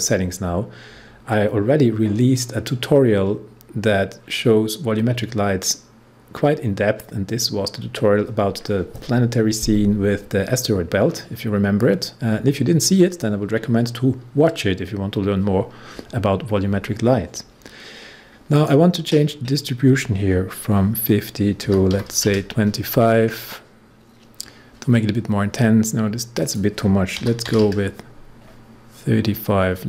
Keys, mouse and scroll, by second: 18.5 click, 21.4-22.4 typing, 26.3 click, 26.9-27.9 typing.